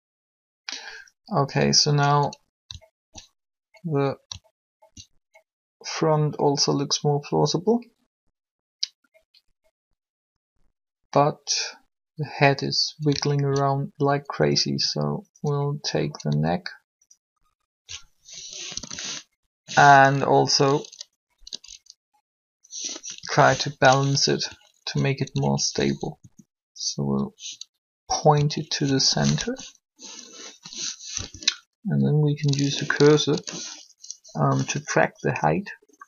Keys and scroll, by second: 18.7 shift+1, 23.1 7, 26.2 alt+shift+r, 29.4 alt+shift+1, 31.1 3.